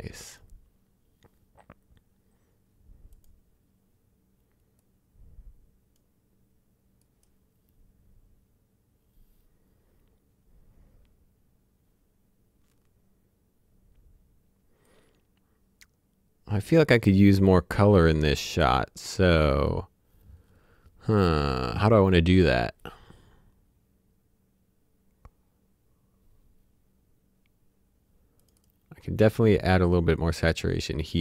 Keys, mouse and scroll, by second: 0.2 click, 1.7-3.1 scroll down 1, 3.1 click, 4.8 click, 14.8 click, 28.4 click, 30.2 click.